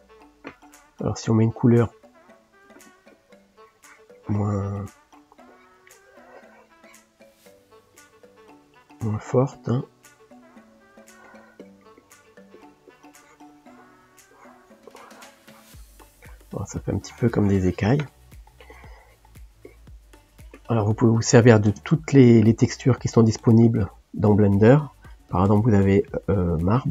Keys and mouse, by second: 3.1-4.9 drag, 4.9 middle click, 5.5-8.3 drag, 9.3 click, 11.6-16.0 drag, 16.0 middle click, 16.9-18.1 drag, 18.1 middle click, 18.7-20.3 drag, 20.3-21.8 shift+middle drag, 21.8 ctrl+space, 26.2 click.